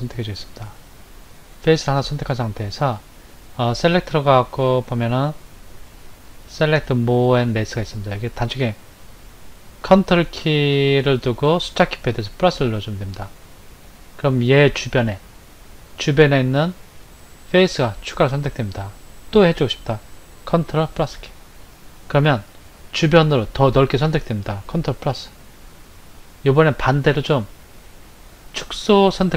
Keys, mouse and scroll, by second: 3.9 click, 21.1 ctrl+KP_Add, 25.1 ctrl+KP_Add.